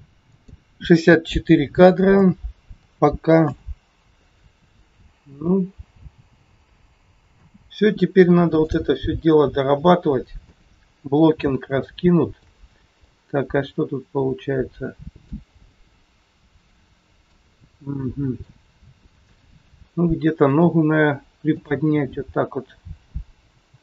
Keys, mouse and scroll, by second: 0.2 click, 5.2 space, 7.3 space, 8.6 click, 9.5 scroll up 2, 10.4 KP_3, 11.8 shift+middle click, 12.8 middle click, 15.5-15.8 scroll up 2, 15.7 shift+middle click, 17.6 middle click, 20.4 click, 21.5 click.